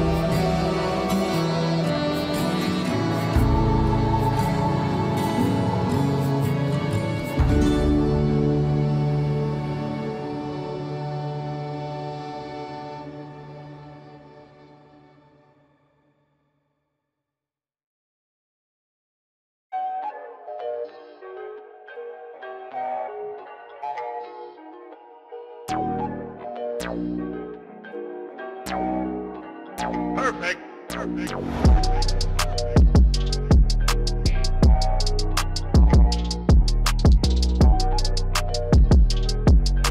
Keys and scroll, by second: 7.7 ctrl+a, 26.2 F4, 38.3 alt+x.